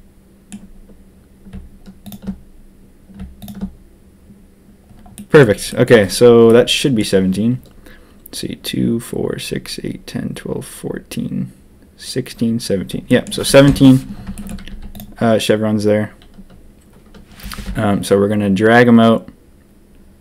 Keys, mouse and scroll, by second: 2.0 shift+click, 3.3 shift+click, 5.1 click, 5.6 click, 6.4 click, 13.0 click, 13.6 ctrl+KP_3, 14.4 shift+middle click, 14.6 z, 17.4 g.